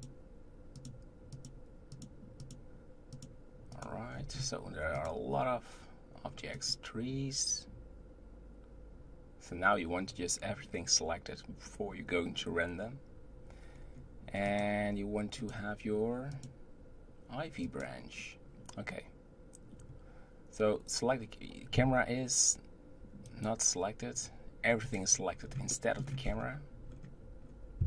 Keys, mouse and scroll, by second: 0.7 click, 1.3 click, 1.9 click, 2.4 click, 3.2 click, 3.7 click, 4.1-4.9 scroll down 2, 4.9 click, 13.7-14.1 scroll down 2, 14.4 click, 15.4 click, 16.3 click, 17.9-19.6 drag, 19.7-21.9 scroll up 1, 21.9 g, 24.8 click, 25.4-25.7 scroll down 4, 25.7-26.2 middle drag, 26.0 scroll up 1, 26.9-27.8 middle drag, 26.9 scroll up 2.